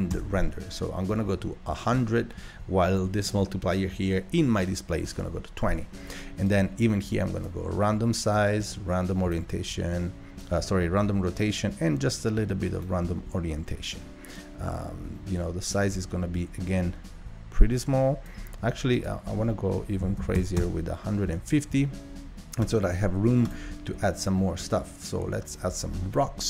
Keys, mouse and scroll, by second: 6.5-17.5 drag, 19.1-22.4 drag, 22.7-26.4 drag.